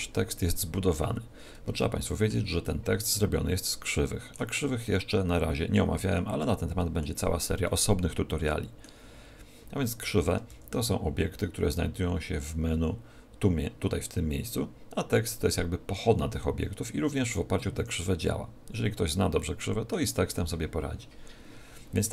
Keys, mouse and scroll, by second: 1.1 scroll down 1, 1.7 scroll down 3, 1.7 shift+middle click, 2.6 middle click, 4.8 middle click, 6.3 middle click, 10.5 shift+a, 19.3 middle click.